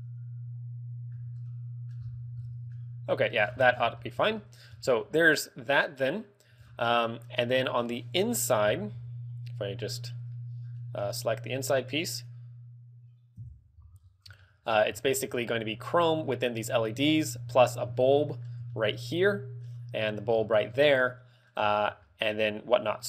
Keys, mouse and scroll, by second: 1.3 z, 1.6 middle click, 2.2-2.8 scroll up 8, 2.8 middle click, 3.5-4.1 scroll down 15, 4.1 middle click, 4.3 z, 4.5 middle click, 4.8 scroll up 5, 5.3 middle click, 6.1 middle click, 6.9 scroll down 3, 7.0 middle click, 8.4 KP_Divide, 10.5 middle click, 11.4 right click, 12.7 right click, 13.5 KP_Divide, 14.0 z, 14.1-15.2 scroll up 8, 14.5 shift+middle click, 15.2 shift+middle click, 15.6 scroll up 3, 16.8 scroll up 5, 18.2 middle click, 18.9 shift+middle click, 19.1 scroll up 6, 19.4 middle click, 20.4-21.1 scroll down 9, 21.2 middle click, 21.7 scroll up 5, 21.8 z, 22.2 shift+middle click, 22.8-23.0 scroll down 6.